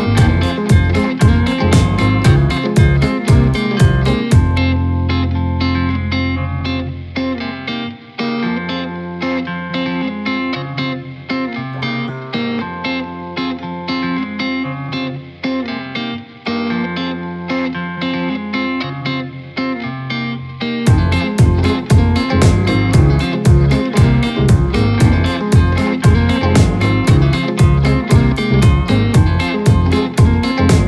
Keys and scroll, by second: 8.0 ctrl+KP_Subtract, 14.8-15.2 typing, 17.6-18.7 typing.